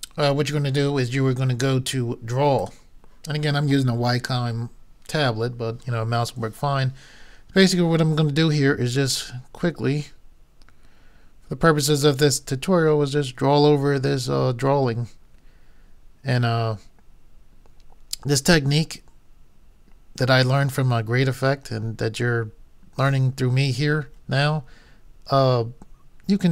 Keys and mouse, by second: 2.6-4.6 drag.